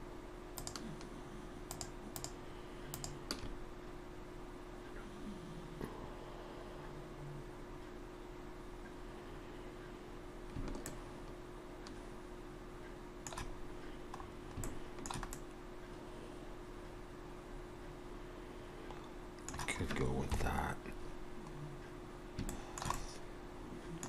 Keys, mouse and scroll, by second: 10.0-10.6 scroll down 3, 10.9 shift+middle click, 14.2 scroll up 2, 14.6 shift+middle click, 15.2 middle click, 20.3 KP_3, 22.5 shift+middle click, 22.9 middle click.